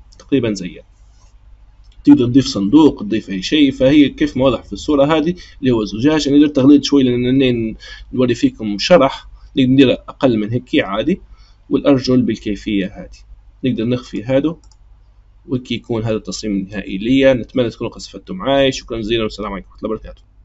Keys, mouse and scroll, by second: 14.0 click, 14.6 click.